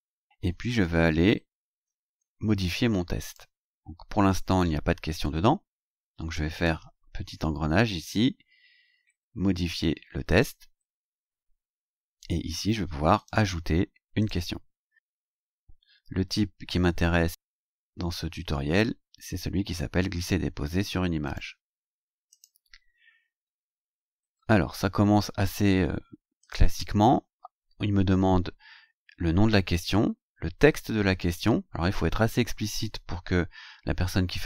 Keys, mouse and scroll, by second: 0.5-2.1 scroll down 8, 3.3 click, 6.5 click, 10.3 click, 13.2 click, 14.2 click, 17.4-17.7 scroll down 2, 18.5 scroll down 2, 21.3 click, 22.3 click, 26.4 click, 27.4 scroll down 2, 31.1 scroll down 2.